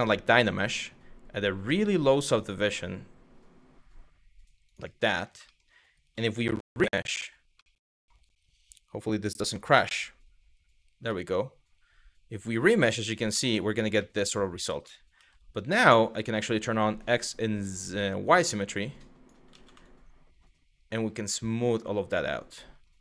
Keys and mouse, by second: 4.8 middle click, 5.1 shift+middle click, 9.9 ctrl+r, 10.8-12.5 middle drag, 13.7 middle click, 14.8 f, 19.2 ctrl+z.